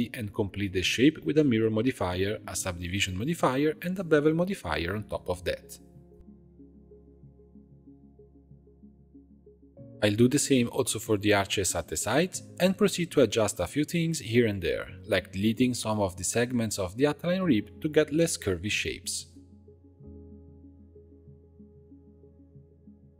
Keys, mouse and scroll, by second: 1.1 Tab, 2.1-3.8 drag, 4.1-5.5 drag, 5.5 Tab, 5.9-8.6 drag, 9.0 Tab, 9.4 click, 10.4 click, 10.8-11.8 middle drag, 12.8 click, 13.5 shift+click, 13.9 scroll down 1, 14.1-15.1 middle drag, 15.3-16.4 shift+middle drag, 16.4 shift+click, 17.1 x, 18.0 Tab, 18.7 click, 19.2 shift+click, 20.0 x, 21.1 click, 21.3 g.